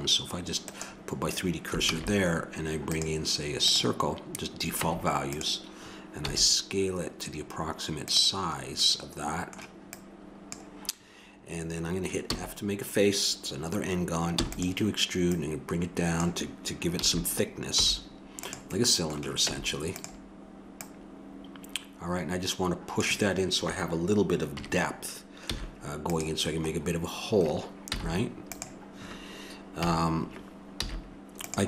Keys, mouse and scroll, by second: 1.8 shift+a, 4.7 Tab, 6.3 s, 9.8-11.6 drag, 12.2 f, 14.3 e, 15.2-16.8 drag, 17.0 a, 17.8 z, 19.5 Tab, 24.5 KP_3, 25.4 z, 27.8 z, 29.8 KP_7, 30.8 z.